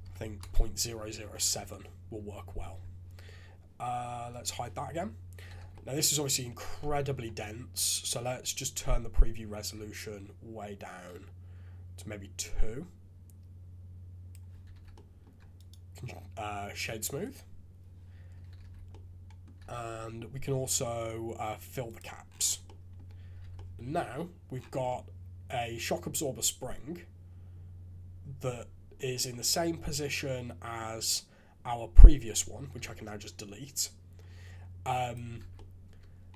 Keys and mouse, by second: 1.5 shift+z, 1.7-2.6 drag, 4.3 click, 5.5 shift+z, 5.7-6.3 drag, 6.8-7.1 middle drag, 8.5-10.1 middle drag, 10.1 shift+click, 10.3-14.4 shift+middle drag, 14.7 shift+z, 18.6 shift+z, 18.9-19.4 middle drag, 19.7 shift+z, 21.8 click, 22.6 click, 23.4 alt+a, 23.5-23.9 drag, 24.8-28.9 drag, 29.5-30.8 middle drag, 32.2 click, 32.8 x, 35.0 click, 35.4 shift+z, 35.5-36.3 drag.